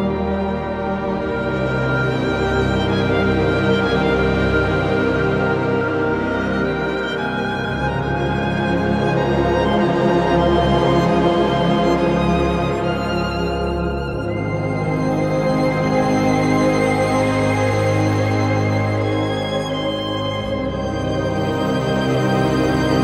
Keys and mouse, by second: 0.6 click, 1.8 click, 3.3 click, 4.4 click, 5.0 Return, 6.4 3, 8.3 alt+z, 9.6 shift+click, 10.9 x, 11.9 1, 13.0 shift+click, 14.0 j, 15.9 j, 17.4 j, 18.2 shift+click, 19.3 j, 20.1 shift+click, 21.0 j, 22.8 j.